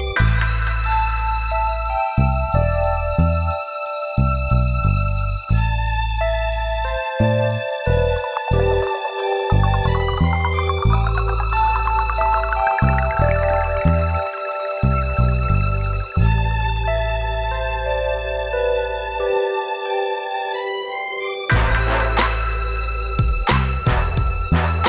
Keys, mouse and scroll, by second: 0.6 click, 0.7 click, 1.1 click, 1.1 double click, 1.6 double click, 4.5 click, 5.1 click, 5.6 middle click, 8.3 scroll down 2, 12.2 click, 12.9 click, 14.3 click, 15.2 click, 16.2 click, 17.2 click, 18.0 click, 18.8 click, 19.0 click, 20.0 click, 20.3 scroll down 2, 22.9 scroll up 2, 24.4 click.